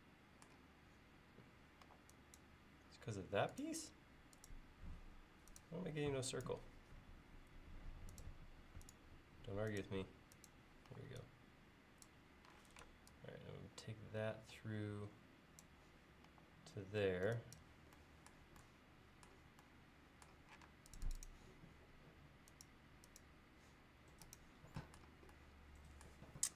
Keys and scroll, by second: 1.9 e, 2.9 l, 10.9 e, 12.6 p, 16.3 e, 20.7 space.